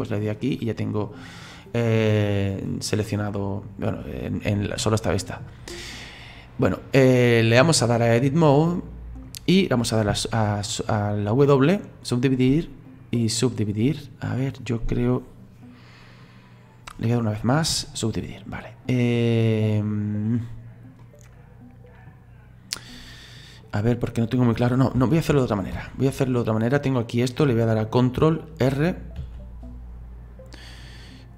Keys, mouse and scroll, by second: 0.4-3.4 middle drag, 7.6-10.1 drag, 10.1 w, 12.5 w, 17.7 w, 21.0-24.0 middle drag, 25.0 ctrl+z, 25.3 ctrl+z, 25.7 ctrl+z, 29.2 alt+r.